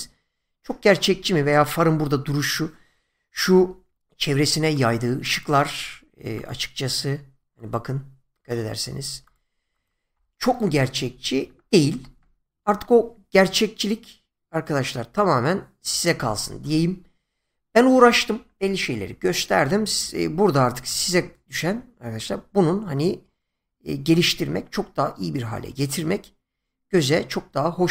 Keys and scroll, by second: 3.5 <, 11.9 space, 24.1 space.